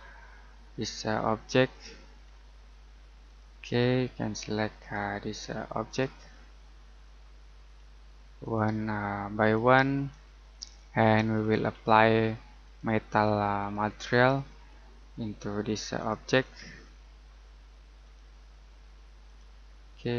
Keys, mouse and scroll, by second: 1.7 click, 2.2-3.2 scroll up 1, 3.2 click, 6.2-6.6 scroll down 1, 6.6 middle click, 7.1-8.2 scroll up 1, 8.4 click, 9.8-10.2 scroll down 1, 10.2 middle click, 11.3-12.6 scroll up 1, 12.6 click, 14.0-14.4 scroll down 1, 14.4 middle click, 15.1-15.9 scroll up 1, 15.9 click, 16.4 middle click, 16.8-18.0 scroll up 1, 18.0 click.